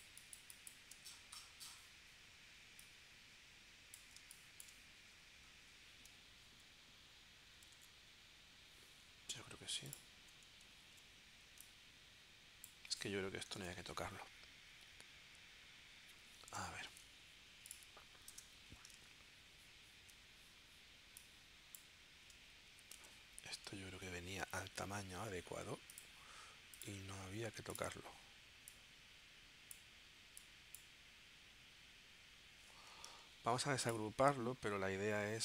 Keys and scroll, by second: 4.2 space, 7.8 super+Tab, 10.8 super+g, 13.6 Delete, 13.6 BackSpace, 18.3 BackSpace, 22.7 super+c, 22.9 super+Tab, 23.9 super+v, 33.3 shift+super+g.